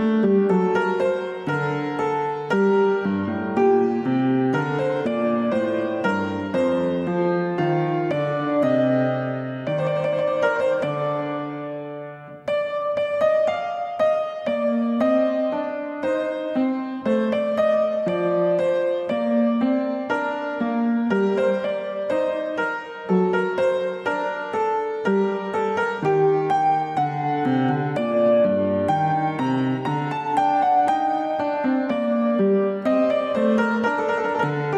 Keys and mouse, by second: 1.7 click, 2.2-3.5 middle drag, 6.4-9.6 drag, 10.7-13.7 drag, 14.0 ctrl+z, 14.5 ctrl+z, 15.3-20.2 drag, 21.0-24.1 drag, 24.5-26.6 middle drag, 27.1 shift+middle click, 28.8-30.5 drag, 33.3 click.